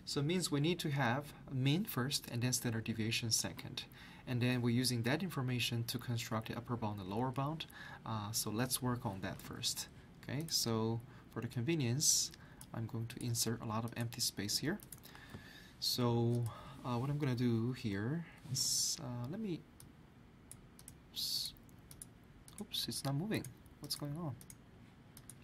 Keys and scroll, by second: 9.4 alt+Tab.